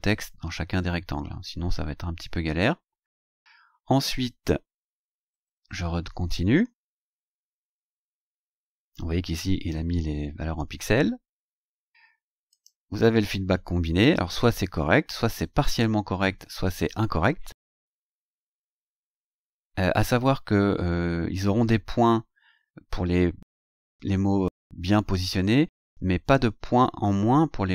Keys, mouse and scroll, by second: 3.5-3.9 scroll down 2, 4.7-8.6 scroll down 20, 11.0 scroll down 2, 12.5 click, 13.4-13.7 scroll down 2, 15.6-15.9 scroll down 2, 18.7-19.1 scroll up 2, 19.8 scroll down 2.